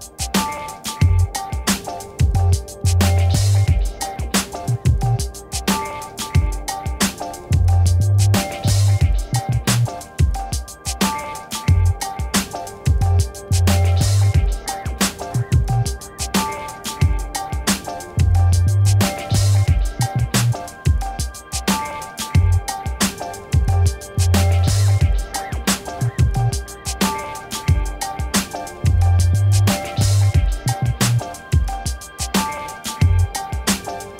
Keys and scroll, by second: 0.1 x, 1.5 b, 21.2 ctrl+t, 25.1 Return, 31.8 7, 32.4 Return.